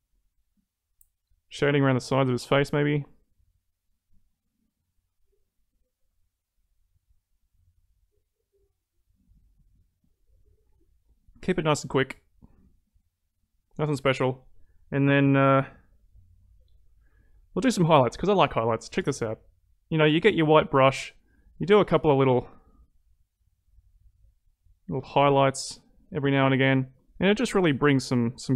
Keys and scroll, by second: 11.3 ctrl+z.